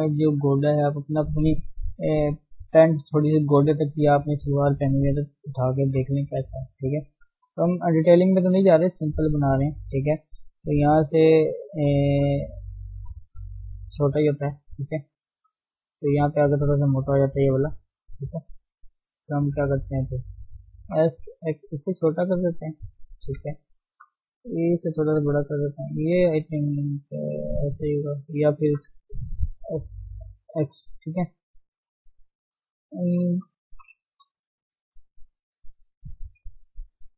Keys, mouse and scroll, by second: 14.1-15.1 drag, 15.1 d, 17.1 click, 17.5 d, 17.7-19.5 drag, 20.9 s, 22.9 click, 23.3 alt+shift+click, 23.9 s, 25.6 click, 26.6 s, 28.4 click, 28.9 s, 31.4-31.8 scroll down 2, 31.8-33.7 middle drag, 33.7 KP_1, 34.0-34.6 scroll up 1, 34.6-37.1 shift+middle drag.